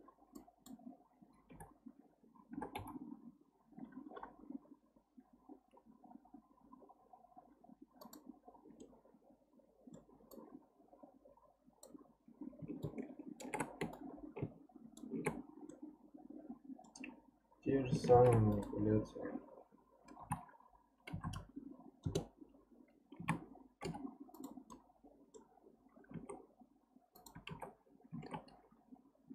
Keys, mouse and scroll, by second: 0.3 click, 1.5 o, 1.9 scroll down 2, 2.5 g, 8.8-10.3 middle drag, 10.3 click, 12.8-13.9 ctrl+shift+right drag, 13.9-15.7 shift+right drag, 15.7-18.1 middle drag, 18.1 shift+d, 20.2 r, 23.2 a, 23.8 m, 24.7-26.1 middle drag, 26.1 alt+z, 27.1 click, 27.5 alt+z, 28.2 alt+z, 28.6-29.0 scroll down 1, 29.2 g.